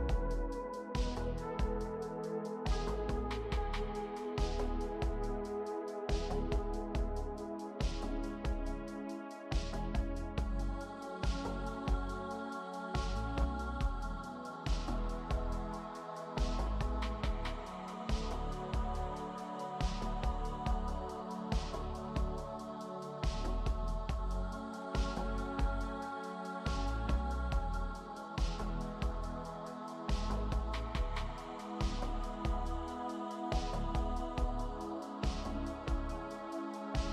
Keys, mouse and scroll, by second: 3.2 ctrl+t.